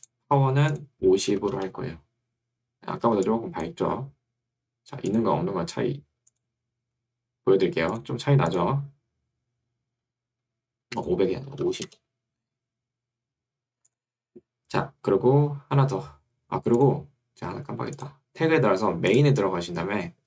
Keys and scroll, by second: 1.5 0, 1.5 Return, 3.9 Escape, 11.5 5, 11.9 Return.